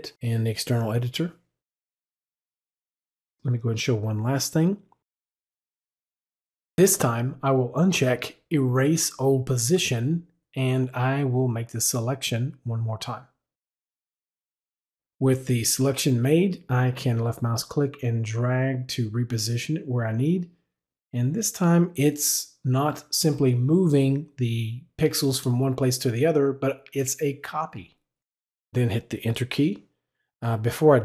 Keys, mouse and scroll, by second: 7.7 Escape, 7.7 click, 13.5-14.7 drag, 17.8-19.6 drag.